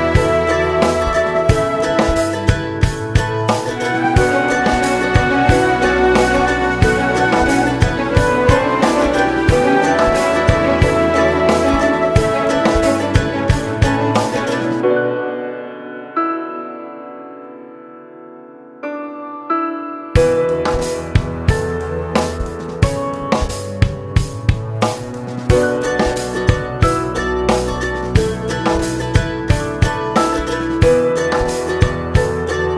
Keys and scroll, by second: 25.1 ctrl+alt+z, 28.2 [.